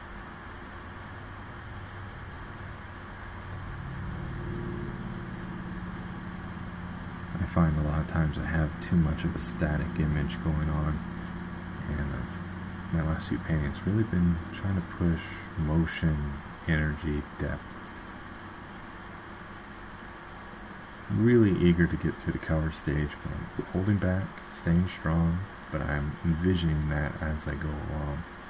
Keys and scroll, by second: 12.7 ctrl+z, 21.8 ctrl+z.